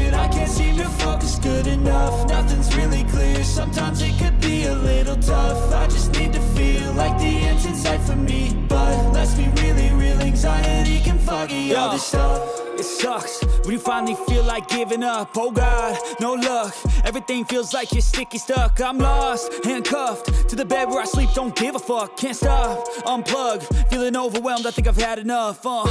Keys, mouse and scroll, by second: 7.4 alt+space, 7.6 alt+click, 7.8 alt+space, 7.9 alt+click, 7.9 alt+space, 8.1 alt+click, 8.2 alt+space, 10.7 ctrl+l, 14.7 right click, 17.5 shift+click, 24.5 right click.